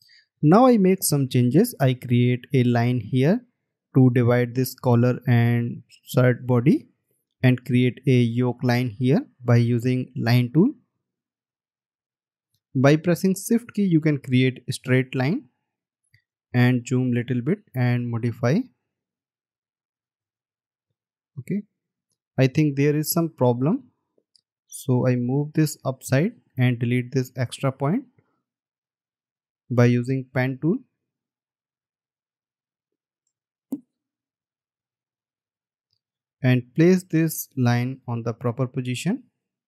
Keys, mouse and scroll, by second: 17.5 alt+scroll up 1, 22.5 ctrl+z, 33.8 alt+scroll up 1, 35.3-35.8 alt+scroll down 1.